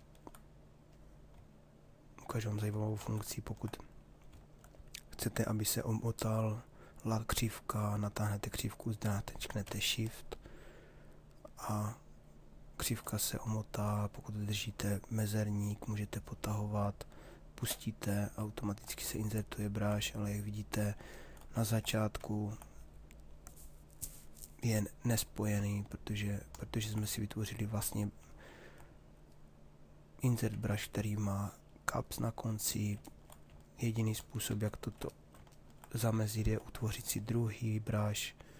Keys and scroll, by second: 2.5 ctrl+z, 12.7 shift+space, 34.1 ctrl+z.